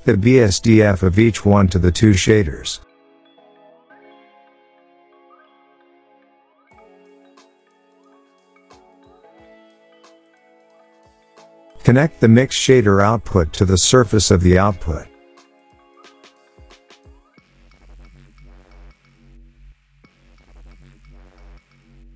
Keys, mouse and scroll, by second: 1.5 click, 6.0 click, 9.8 click, 12.2 click, 15.0 click, 19.2 click, 21.5 click.